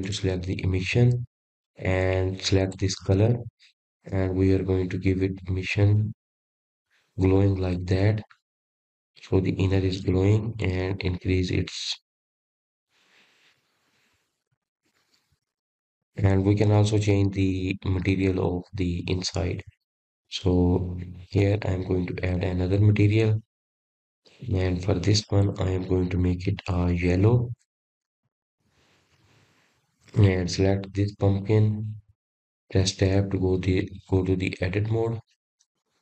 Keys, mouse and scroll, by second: 0.7-3.8 drag, 7.3 click, 15.3-18.2 drag, 18.2-20.3 middle drag, 20.3-20.8 scroll up 2, 22.4-24.9 middle drag, 24.9 click, 25.6 click, 26.3-28.4 drag, 32.5 click, 33.2 click, 33.8 click, 35.0 click.